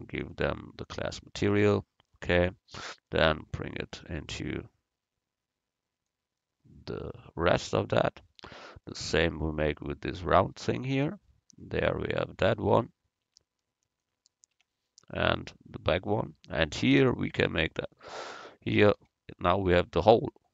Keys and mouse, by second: 0.3-1.5 drag, 1.5 Tab, 1.7-2.8 middle drag, 3.9-5.6 drag, 9.8 click, 11.0 Tab, 12.3 click, 13.3 Tab, 14.6 Tab, 17.0 right click, 18.8-20.5 right drag.